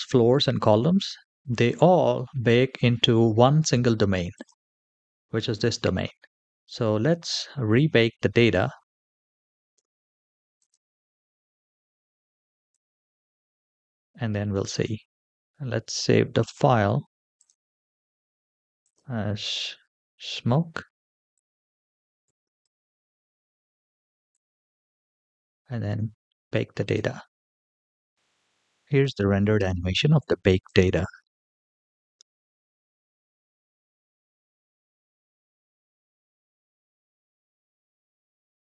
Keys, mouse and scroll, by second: 2.7-3.5 middle drag, 4.1 click, 5.1-6.4 middle drag, 10.4 drag, 11.0-12.6 scroll down 2, 12.6 click, 12.6 scroll down 1, 16.2-17.4 drag, 26.6-28.1 drag, 30.4 click.